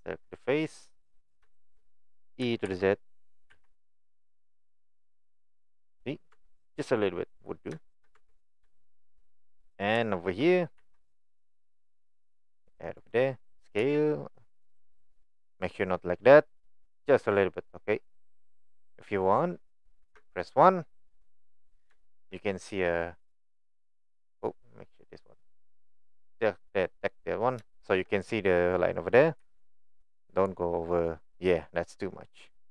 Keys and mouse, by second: 1.6 shift+middle click, 5.7 click, 6.3 Tab, 6.7-7.3 middle drag, 7.8 shift+middle click, 10.8 ctrl+r, 13.9 s, 20.0 KP_1, 21.6 click, 25.0 click, 27.8 shift+middle click.